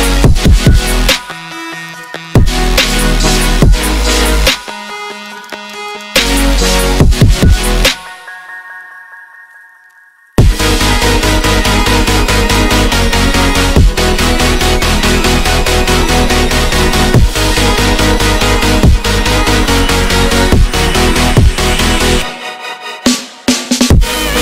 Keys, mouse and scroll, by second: 0.5-2.6 middle drag, 2.8 click, 3.6 click, 6.8-7.1 ctrl+middle drag, 7.1 click, 7.3-8.2 ctrl+middle drag, 8.4 middle click, 8.7 click, 9.0 ctrl+middle click, 9.5 click, 9.8 middle click, 10.1 s, 11.2 Tab, 11.9 click, 12.2 s, 12.9 middle click, 13.3 click, 13.9 click, 14.2 click, 14.4 Tab, 14.7 middle click, 15.2 click, 15.9 click, 16.2 middle click, 17.1 click, 17.8 middle click, 18.0 s, 18.5-19.2 ctrl+middle drag, 19.2 click, 19.7 click, 20.0-21.2 middle drag, 21.2 s, 21.8-23.3 ctrl+middle drag, 23.3 click, 23.5 middle click, 24.1-24.4 drag.